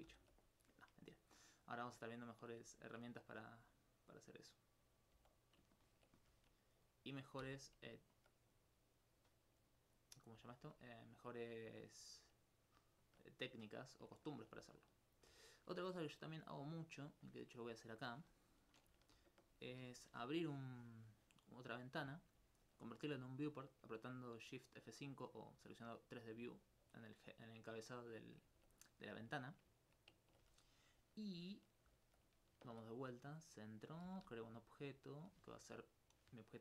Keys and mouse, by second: 0.1 alt+h, 1.1 right click, 2.0 alt+click, 3.8 right click, 5.2 x, 5.4 click, 6.7 right click, 7.6 click, 8.2 alt+click, 8.5 right click, 10.6 click, 16.9-18.5 drag, 19.5 shift+F5, 21.8 middle click, 22.7 alt+click, 28.1 middle click, 32.7 shift+s, 33.3 click, 34.1 shift+a, 35.0 click.